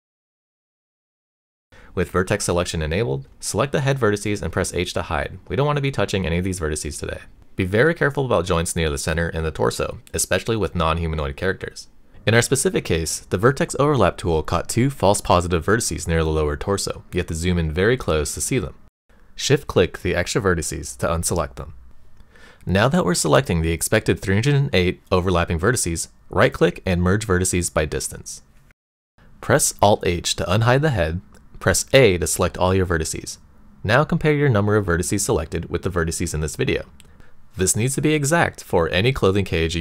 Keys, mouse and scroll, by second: 0.8 shift+middle click, 2.8-4.0 drag, 5.1 h, 9.1 shift+middle click, 11.2-12.2 shift+middle drag, 12.8 shift+middle click, 14.0 click, 15.2 click, 16.3-18.2 shift+middle drag, 20.0 shift+click, 20.9 shift+click, 23.2-27.7 right drag, 28.8 click, 31.1 alt+h, 31.9 shift+middle click, 32.8 click, 33.8 a.